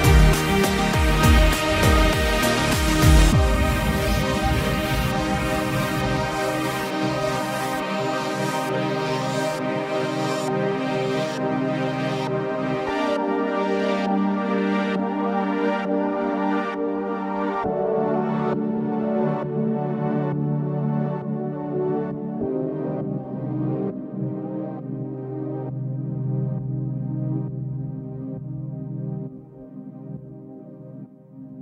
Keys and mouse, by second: 3.7 ctrl+z, 3.9 ctrl+z, 7.0 ctrl+z, 7.2 ctrl+z, 8.2 ctrl+z, 8.6 ctrl+z, 10.2 ctrl+z, 10.8 ctrl+z, 11.0 ctrl+z, 11.4 right click, 11.5 right click, 11.9 ctrl+z, 12.6 ctrl+z, 13.3 ctrl+z, 13.8 ctrl+z, 14.5 ctrl+z, 14.8 ctrl+z, 15.1 ctrl+z, 15.3 ctrl+z, 17.8 ctrl+z, 18.1 ctrl+z, 18.4 ctrl+z, 19.1 ctrl+z, 19.3 ctrl+z, 19.4 ctrl+z, 19.7 ctrl+z, 20.7 ctrl+z, 21.4 ctrl+z, 22.1 ctrl+z, 22.6 ctrl+z, 24.9 ctrl+z, 25.2 ctrl+z, 25.4 ctrl+z, 25.7 ctrl+z, 25.7 right click, 25.8 ctrl+z, 26.0 ctrl+z, 26.5 ctrl+z, 27.2 ctrl+z, 27.6 ctrl+z, 27.8 ctrl+z, 29.1 ctrl+z, 29.2 ctrl+z, 29.6 ctrl+z.